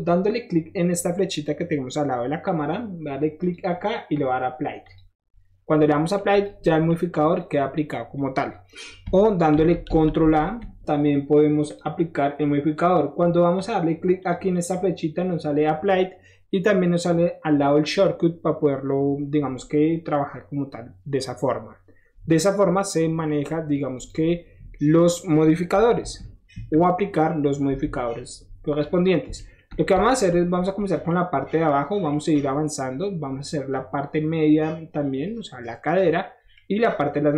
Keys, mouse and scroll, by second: 3.4 click, 4.8 click, 5.3 scroll down 1, 6.3 click, 6.6 middle drag, 7.3 click, 9.5 ctrl+z, 9.8 ctrl+z, 10.2 ctrl+z, 11.7 click, 14.1 click, 14.5 click, 21.8 middle drag, 22.0 middle click, 22.1 middle click, 22.4-23.2 middle drag, 23.9 click, 24.2-25.1 middle drag, 26.0 KP_1, 26.5 KP_3, 27.6 KP_1, 28.7-29.2 middle drag, 29.3-29.8 shift+middle drag, 29.8 scroll up 1, 29.9-30.3 shift+middle drag, 30.3 scroll down 1, 30.4 shift+middle drag, 30.6 scroll up 1, 30.6 shift+middle drag, 31.1-31.4 shift+middle drag, 32.1-36.2 shift+middle drag, 36.8 middle click, 37.0 middle click, 37.1 middle drag.